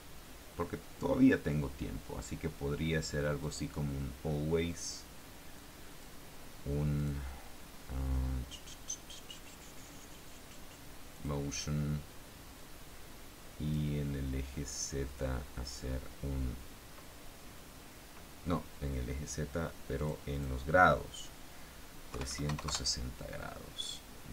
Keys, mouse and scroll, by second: 3.6 click, 5.7 click, 7.1 click, 11.3 click, 12.7-14.1 drag, 15.2 click, 20.1 click, 20.5 click, 22.3 KP_3, 22.4 KP_6, 22.6 KP_0, 22.8 KP_Enter.